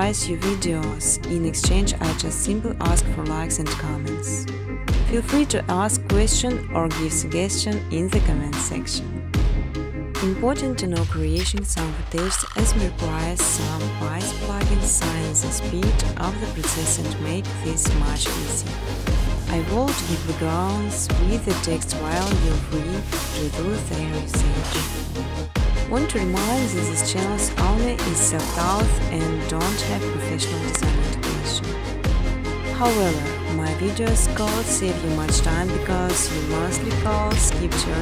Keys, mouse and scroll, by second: 0.5-3.1 typing, 4.4 Tab, 5.0-7.2 typing, 10.5 click, 10.8 typing, 11.7 click, 11.8 typing, 13.5 click, 15.0 click, 16.0 click, 16.4-21.3 typing, 21.7 Tab, 22.6-26.5 typing, 28.7-29.5 typing, 30.3 Tab, 30.8-34.4 typing, 35.5 Return.